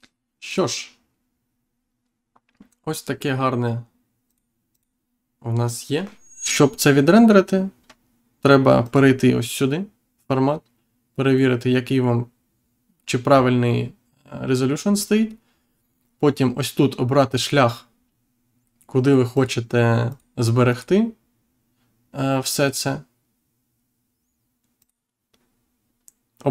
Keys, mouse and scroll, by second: 0.4 click, 4.2 click, 17.3 click, 19.3 click, 20.0 click, 20.6 click, 24.7 click.